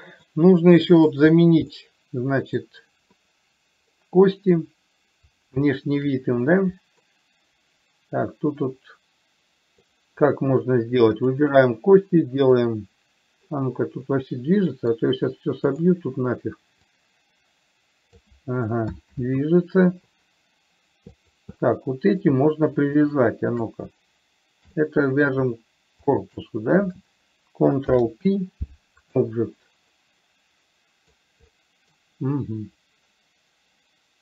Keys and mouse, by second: 0.6 middle click, 2.1 middle click, 4.3 middle click, 6.0 shift+middle click, 7.3-10.2 middle drag, 11.6 click, 12.8-13.8 drag, 14.5-15.2 middle drag, 16.1 click, 17.2-18.5 drag, 19.5 ctrl+z, 21.5 click, 21.8-22.6 middle drag, 25.1-25.7 middle drag, 26.3 shift+click, 28.1 ctrl+p, 30.2-31.6 middle drag, 31.8-32.3 middle drag.